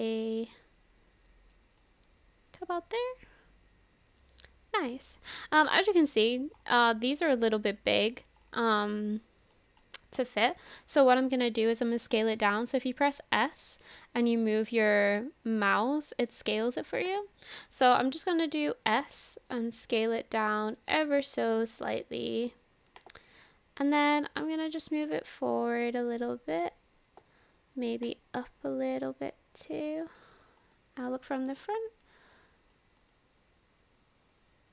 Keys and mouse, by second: 1.9-6.3 middle drag, 6.9-8.1 middle drag, 8.6 middle click, 8.6 click, 8.9 middle click, 10.0 middle click, 13.4 s, 17.2-18.7 right drag, 18.7 s, 23.1-27.3 drag, 28.1-30.1 drag, 30.7-32.8 middle drag, 33.1 middle drag, 33.2-34.7 drag, 33.2-34.7 right drag.